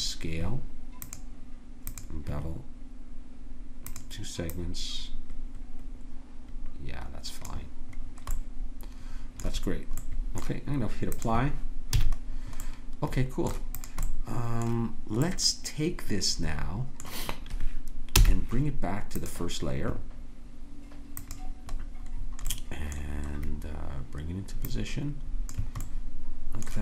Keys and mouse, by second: 1.0-6.4 drag, 8.1-10.7 middle drag, 11.2-13.1 drag, 12.0 a, 13.8-18.1 drag, 18.1 m, 21.2 click, 24.7 click, 26.1-26.8 drag.